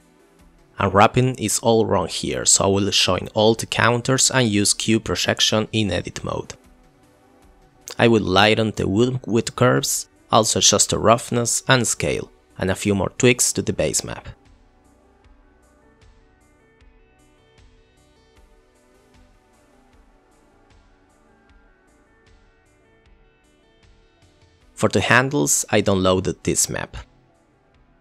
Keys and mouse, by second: 0.4 KP_Divide, 0.8 click, 1.2 click, 1.7 ctrl+j, 2.0-2.4 drag, 2.8 click, 3.2 click, 3.7 click, 4.3 click, 6.9 click, 7.4 click, 7.8 click, 8.0 click, 8.7 click, 9.0 click, 9.7 click, 10.9 click, 11.5 click, 11.7 click, 12.5 click, 13.9 click, 14.1 ctrl+t, 14.1 click, 14.3 click, 14.6 click, 14.8 click, 15.3 click, 17.7 click, 18.1 click, 18.2 click, 19.8 click, 22.5 click.